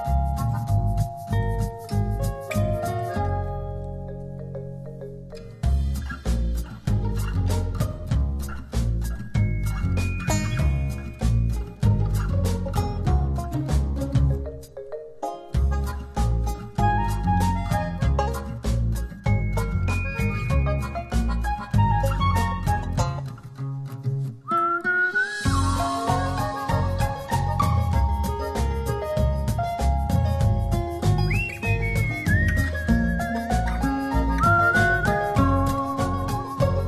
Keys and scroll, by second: 18.2 super+d, 23.4 ], 35.9 [.